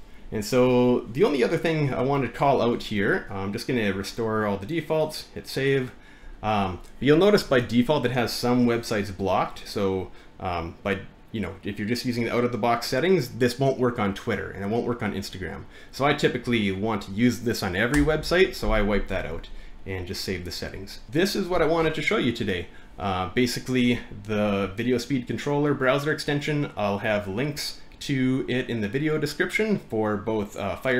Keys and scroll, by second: 20.6 BackSpace.